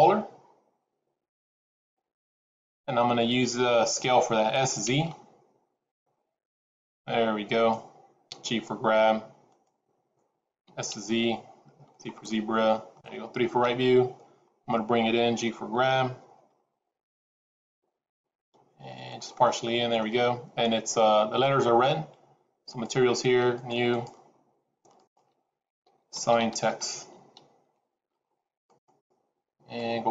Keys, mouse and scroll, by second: 4.5 s, 8.4 g, 10.6 s, 12.2 middle click, 13.5 KP_3, 14.2-15.2 scroll up 3, 15.3 g, 19.4 middle click, 22.6 click, 23.4 click, 23.8 click, 24.9 click, 28.8 click.